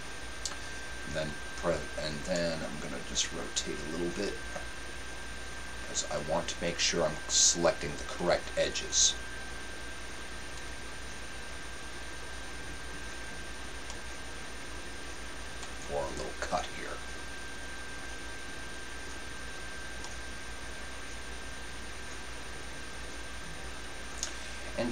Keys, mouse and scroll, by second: 2.3-4.3 middle drag, 10.5-14.7 right drag, 13.9-15.7 middle drag, 17.3-20.2 right drag, 20.1-21.8 middle drag.